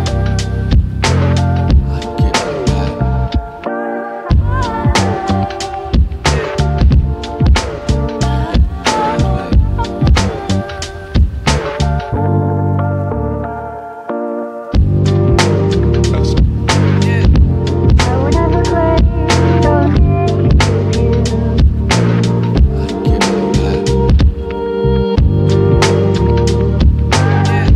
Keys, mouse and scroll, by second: 0.1 scroll up 1, 1.9 click, 5.2 click, 12.0-23.6 drag.